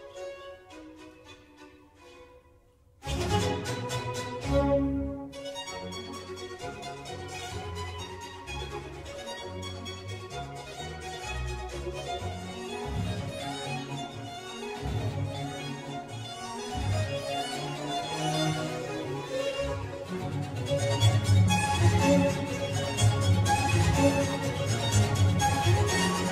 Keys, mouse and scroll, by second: 2.8-4.6 scroll up 1, 4.6-15.6 scroll up 1, 15.6-17.9 scroll up 1, 17.9-20.6 scroll up 1, 20.6-25.3 scroll up 1, 25.3-25.8 scroll up 1, 25.8-26.3 scroll up 1.